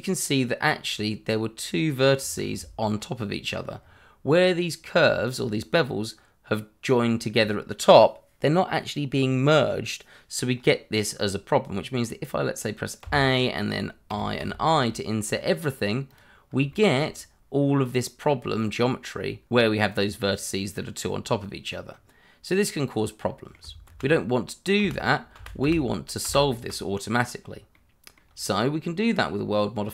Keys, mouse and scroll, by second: 2.2 Escape, 2.9 scroll up 1, 3.3 middle click, 3.8 scroll down 1, 10.5-12.6 scroll up 1, 13.0 a, 14.1 i, 16.1 click, 16.7 shift+middle click, 17.0 scroll up 1, 20.3 scroll down 1, 22.6 middle click, 23.9 ctrl+z, 24.8 ctrl+z, 27.7 middle click.